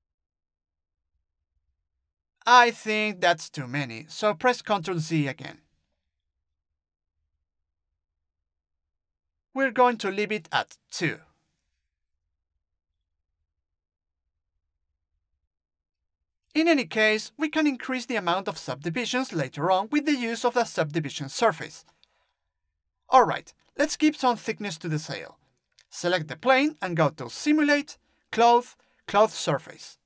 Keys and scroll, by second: 1.2 ctrl+z, 11.1 3, 12.9 BackSpace, 13.4 2.